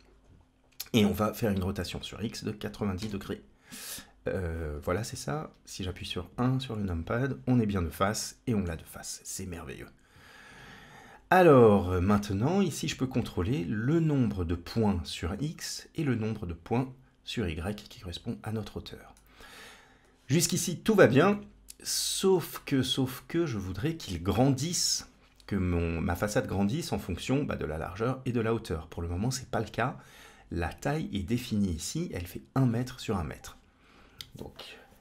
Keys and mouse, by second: 1.7-4.3 drag, 5.2 KP_1, 6.7-8.5 middle drag, 9.2-10.9 drag, 12.6-14.3 drag, 15.1-19.8 drag, 21.2-21.9 middle drag, 23.0-24.0 middle drag, 27.7-29.1 drag, 33.2-33.9 drag.